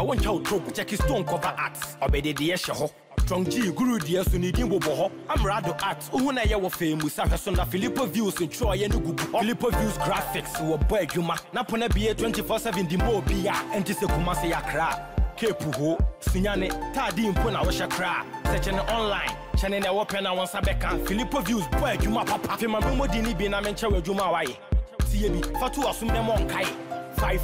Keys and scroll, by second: 3.1 ctrl+a, 20.8 ctrl+a.